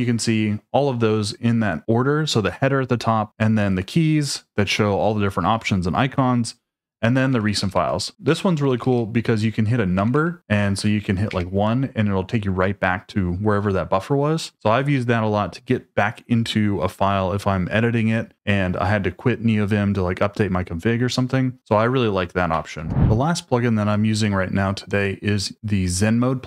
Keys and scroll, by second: 7.3-11.3 typing, 22.7 ctrl+d.